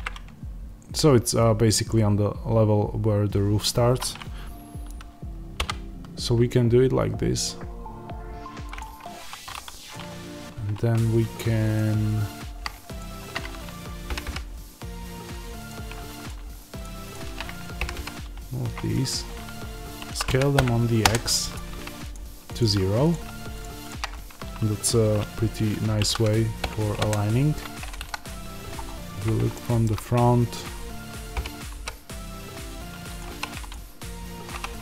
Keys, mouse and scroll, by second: 5.5 i, 8.7 click, 9.1 1, 9.8 click, 11.6 click, 12.9 ctrl+click, 14.0 g, 15.6 click, 16.7 ctrl+click, 17.8 g, 18.8 click, 20.0 s, 21.0 KP_Enter, 23.0 click, 26.0 s, 27.0 KP_Enter, 27.9 KP_1, 28.6 scroll down 1, 29.5-33.1 shift+middle drag, 31.3 g, 33.1 click, 33.2 3, 33.6 click, 34.4 2, 34.6 click.